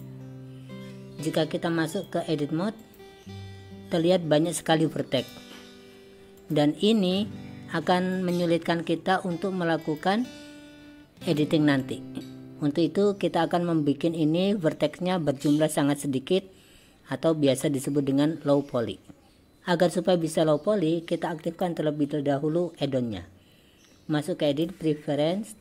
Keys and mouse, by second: 2.1-3.0 drag, 4.6 click, 6.5 click, 8.2 click, 10.0 click, 11.8 click, 19.3 click, 21.5-25.6 drag.